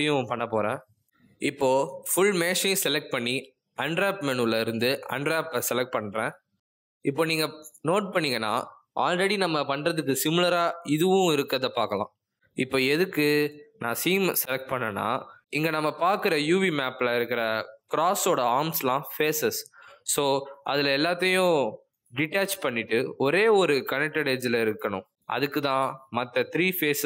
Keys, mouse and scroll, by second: 0.8 click, 2.4 a, 3.9 middle click, 5.1 click, 12.5 middle click, 13.3-13.6 scroll down 2, 13.6 middle click, 17.0 click, 19.5 click, 20.1 click, 20.7 middle click, 21.6 shift+click, 22.2 middle click, 25.3 click, 26.8 shift+click.